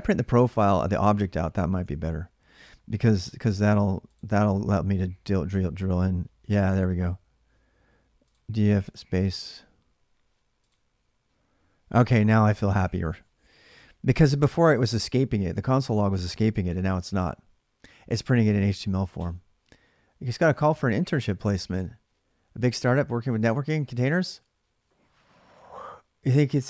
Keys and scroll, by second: 0.0-0.8 typing, 1.6 alt+Tab, 2.8 ctrl+r, 3.9-4.7 typing, 8.5-9.5 typing.